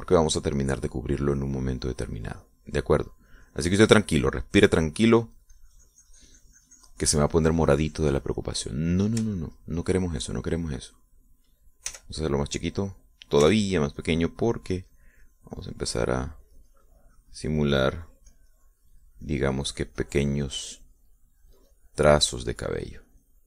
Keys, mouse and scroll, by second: 2.3 middle click, 3.0-6.8 drag, 6.8-9.8 drag, 9.8 middle click, 10.6-12.1 shift+middle drag, 12.3 shift+click, 13.2 f, 13.9 click, 14.8 f, 15.2 click, 15.8-23.4 drag.